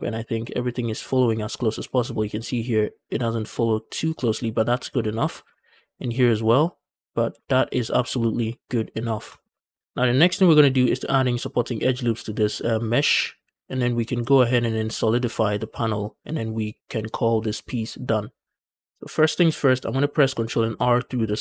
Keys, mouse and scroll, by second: 1.7 shift+middle drag, 1.9-3.2 scroll up 1, 4.6 scroll down 2, 4.8 shift+middle drag, 5.1 shift+middle drag, 5.4 scroll up 1, 7.0 scroll down 2, 7.2 shift+middle drag, 7.8 shift+middle drag, 9.1 shift+middle drag, 9.6 Tab, 9.6-10.9 scroll up 1, 9.6 a, 18.6 shift+middle click, 18.7-20.2 scroll up 3, 19.0 shift+middle click, 20.2 scroll down 1, 20.4 shift+middle click, 20.6 scroll up 1.